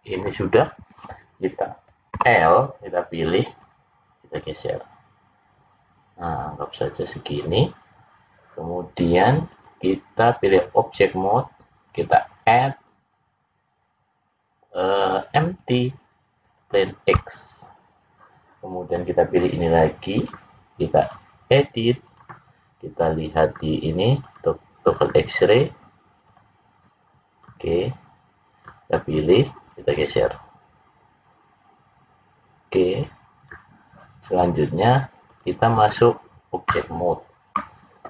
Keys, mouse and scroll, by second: 2.1 l, 3.5 click, 9.4 click, 11.8 click, 18.8 click, 20.1 click, 22.0 click, 24.2 click, 24.9 click, 26.2 click, 29.2 click, 29.6 click, 35.2 click.